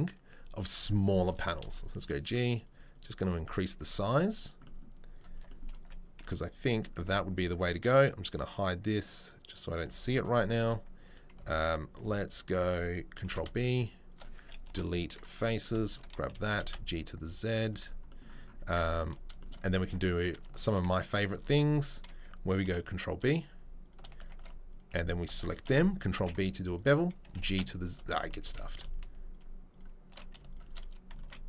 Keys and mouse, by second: 0.0-4.4 right drag, 4.4-8.3 middle drag, 5.3 Tab, 6.2 z, 7.0 a, 8.3 click, 8.7-9.4 middle drag, 9.4 click, 9.5-19.5 middle drag, 9.8 z, 12.2 click, 13.2 ctrl+b, 14.7 Delete, 15.5 click, 16.7 g, 18.6 Tab, 18.8 Tab, 19.8 ctrl+r, 20.4 alt+middle click, 20.5 alt+click, 22.6 ctrl+b, 22.6-24.1 ctrl+middle drag, 24.4 alt+middle click, 25.6-29.2 ctrl+alt+middle drag, 27.2 g, 28.2 ctrl+z, 28.4 ctrl+z, 30.1 shift+middle click, 30.5 right click, 30.5-31.4 middle drag.